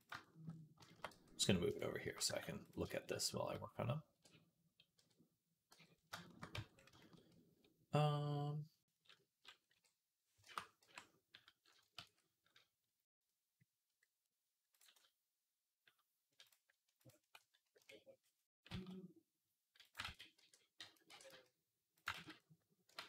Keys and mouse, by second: 0.9 middle click, 0.9 g, 1.7 shift+middle click, 3.0 shift+middle click, 4.0 y, 4.8 t, 5.6 n, 6.4 Tab, 9.6 b, 10.6 n, 11.9 ctrl+s, 13.1 middle click, 14.1-17.1 middle drag, 14.6 click, 16.3 click, 17.1-21.4 drag, 17.6 KP_1, 18.4 e, 19.9 ctrl+z, 20.2 e, 22.0 ctrl+z, 22.8 ctrl+z.